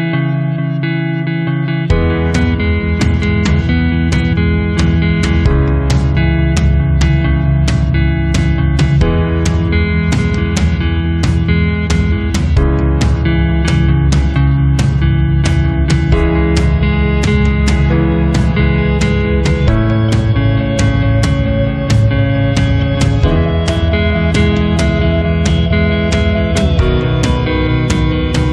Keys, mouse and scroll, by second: 2.1 click, 6.7 click, 14.5 click, 18.8 click, 25.1 click, 26.7 click.